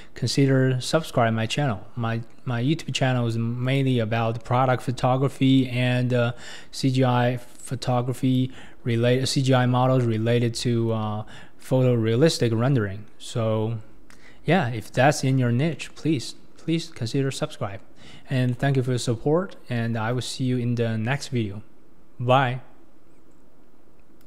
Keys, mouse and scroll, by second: 0.4-3.2 scroll down 1, 3.7 click, 4.7-7.6 middle drag, 7.6-8.9 drag, 8.9-10.0 middle drag, 10.0 scroll down 1, 10.2-10.6 scroll up 2, 10.6-11.2 middle drag, 11.2-11.6 scroll up 1, 11.6 KP_1, 12.5 scroll up 1, 15.7 middle click, 16.1-16.7 scroll down 6, 18.5-19.8 middle drag, 19.8 KP_1, 20.4 scroll up 2, 21.4 middle click.